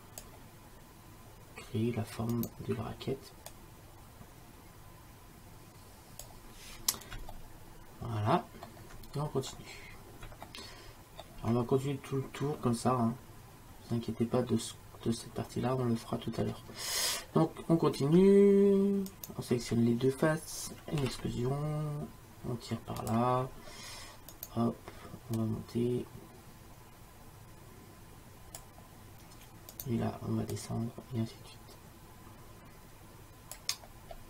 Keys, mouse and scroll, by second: 2.4-3.6 right drag, 7.6-13.5 middle drag, 16.5-19.2 middle drag, 19.2-21.1 drag, 21.1 e, 24.4 click, 24.4 e, 24.6 right click, 25.4-27.0 middle drag, 29.8 right click, 30.6 middle click, 31.8-33.1 drag.